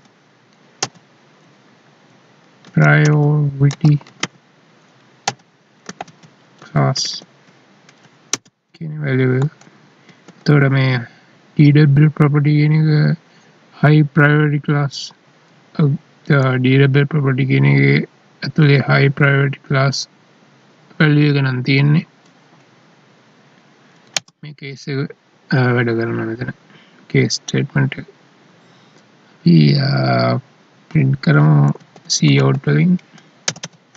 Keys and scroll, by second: 10.0 ctrl+s.